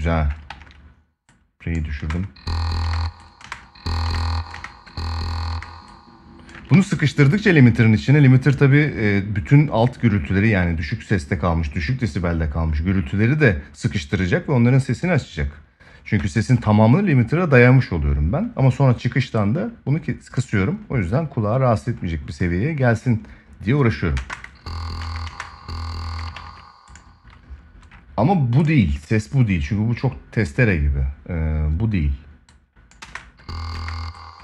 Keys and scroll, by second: 0.2 ctrl+s, 1.7 space, 6.4 ctrl+s, 23.9 space, 26.1 ctrl+s, 32.7 space.